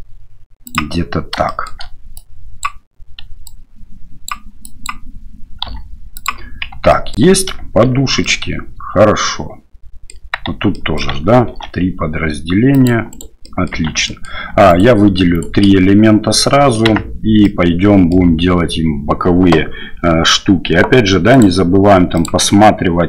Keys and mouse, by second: 1.6 middle click, 2.3 click, 3.5 click, 4.6 click, 5.7 g, 6.7 Tab, 6.9 drag, 7.8 shift+z, 8.2-10.1 drag, 10.4 Tab, 10.7 click, 11.5 ctrl+r, 13.5 click, 13.7 Tab, 14.0 click, 14.7 shift+right click, 15.3 shift+right click, 16.9 Tab, 17.4 click.